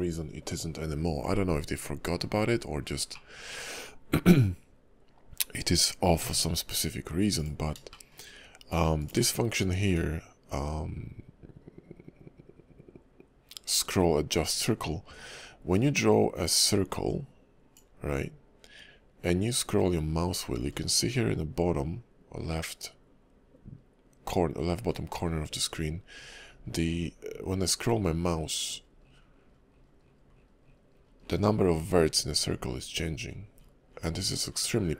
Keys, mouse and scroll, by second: 3.1 middle click, 6.2 d, 7.9 shift+middle click, 9.0 click, 15.7 click.